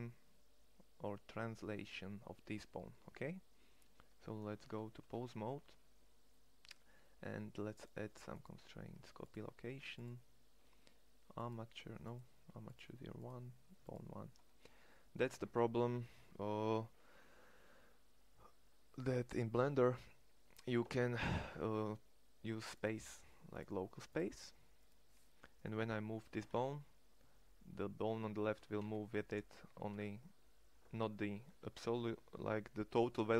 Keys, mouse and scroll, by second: 4.2 ctrl+Tab, 25.8 g, 28.2 g.